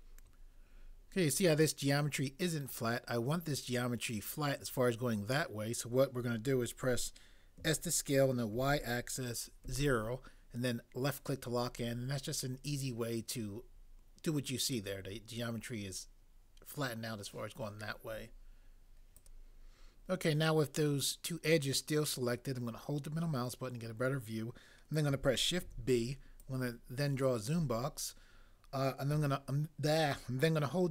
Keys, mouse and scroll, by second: 7.6 s, 8.5 y, 9.6 0, 25.6 b.